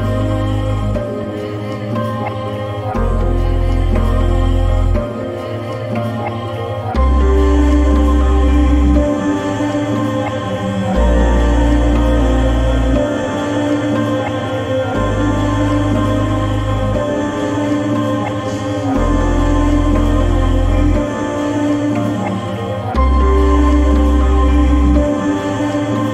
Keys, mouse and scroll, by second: 4.9 ctrl+scroll down 1, 9.1 right click, 10.6-15.5 drag, 12.2-13.8 shift+drag, 22.5-25.2 drag.